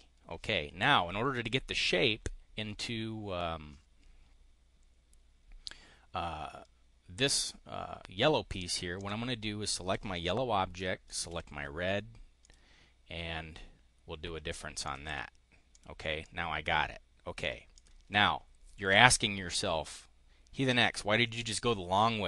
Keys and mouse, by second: 8.8 click, 11.0 shift+click, 12.4 click, 14.8 click, 15.7 click, 16.2-17.5 drag, 17.7 click.